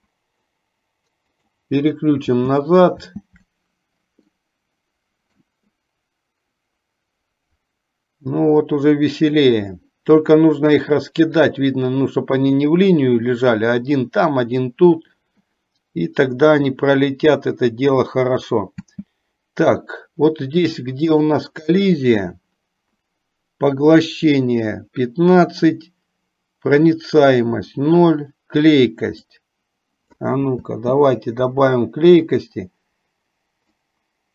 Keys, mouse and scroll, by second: 1.7 click, 2.6 space, 4.6-5.7 middle drag, 19.0 space, 21.2 click, 29.2-30.6 drag, 30.8 space, 34.0-34.3 drag.